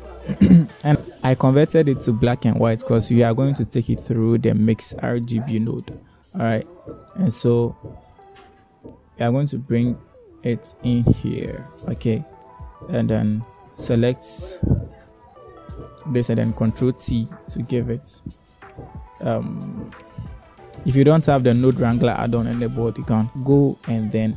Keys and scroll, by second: 0.0 BackSpace, 1.1 m, 1.4 i, 16.9 ctrl+t.